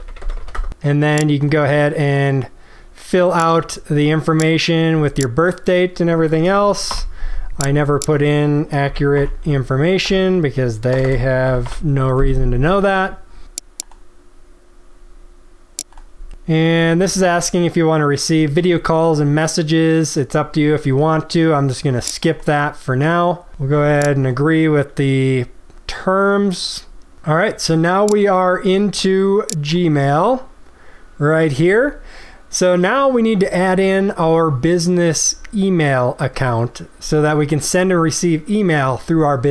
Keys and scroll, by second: 0.5 Tab.